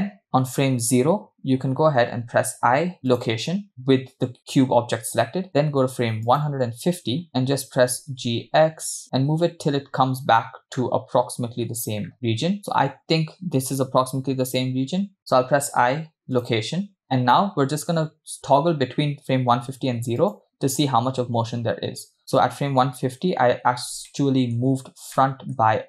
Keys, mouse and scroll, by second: 2.5 i, 6.3 click, 7.3 click, 8.0 g, 12.6 g, 16.7 i, 20.5 click, 22.5 click, 23.2-23.5 scroll up 2, 24.1-24.7 shift+middle drag, 24.7-25.1 scroll up 1, 25.2 shift+middle click.